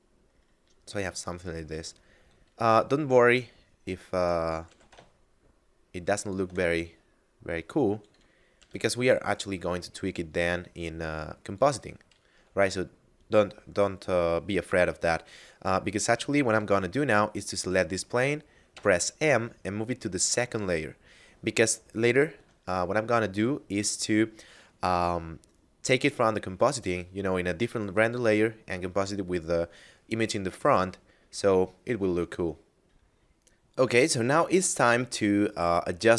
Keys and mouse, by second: 1.3 s, 3.9 click, 4.2 g, 4.5 x, 5.9 shift+click, 8.1 g, 8.2 z, 11.1 click, 17.0 right click, 18.4 m, 19.9 click, 21.5 shift+click, 32.8 F9.